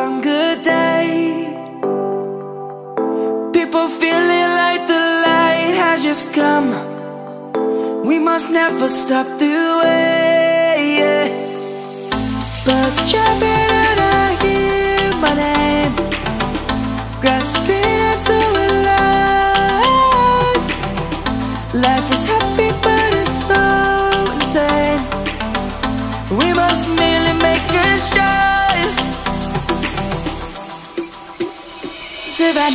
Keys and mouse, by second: 1.6 shift+a, 7.2 click, 8.8 s, 11.8 click, 14.6 click, 17.8 middle click, 21.1 g, 23.6 right click, 27.3 right click, 28.3 middle click, 29.4 click, 30.5 click, 31.1 ctrl+z, 31.3 ctrl+z, 31.5 ctrl+z, 31.9 click.